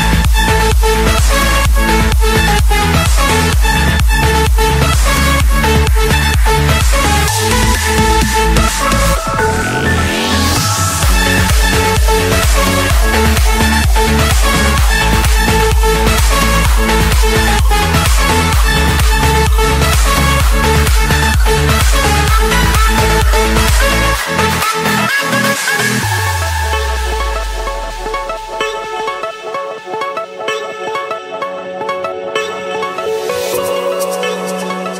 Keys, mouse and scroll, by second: 0.7 click, 2.1 click, 4.0 click, 5.6 click, 6.0 scroll, 6.0-6.4 scroll up 5, 7.7 click, 8.0-8.7 scroll down 5, 8.7-9.3 scroll up 5, 10.4 click, 10.8-11.1 scroll, 11.9 Escape, 13.2-13.8 typing, 16.0 Return, 16.3 click, 17.0 Return, 18.1 click, 20.1 Return, 20.1 click, 23.0-24.2 drag, 24.5-26.0 drag, 26.0 middle click, 26.0-26.6 scroll, 26.8 scroll down 5, 26.9-27.3 scroll up 4, 27.8 click, 28.2-28.8 scroll down 2, 28.9-29.3 scroll up 4, 30.2 click, 32.3 click, 32.9-33.3 scroll down 5, 34.2-34.9 scroll up 5, 34.9 scroll up 1.